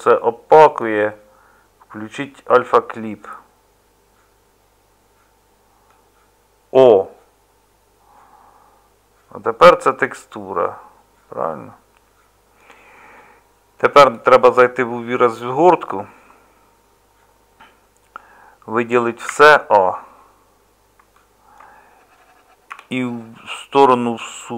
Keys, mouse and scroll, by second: 6.9-24.5 middle drag.